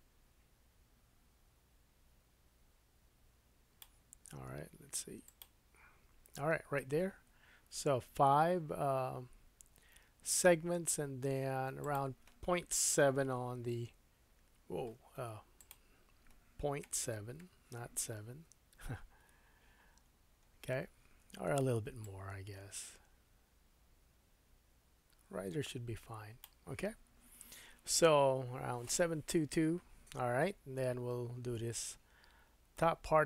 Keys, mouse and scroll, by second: 5.2-8.3 drag, 11.8 click, 15.1 Escape, 15.6 click, 20.0-21.0 scroll up 1, 22.0 shift+click, 32.7-33.2 middle drag.